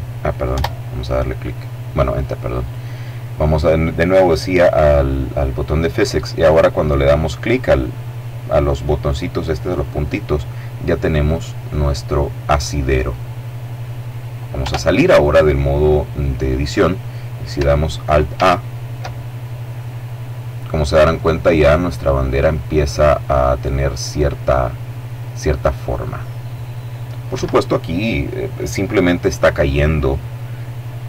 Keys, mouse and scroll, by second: 0.2 Return, 2.2 click, 9.4 click, 10.9 click, 14.2 Tab, 17.9 alt+a, 27.0 Escape.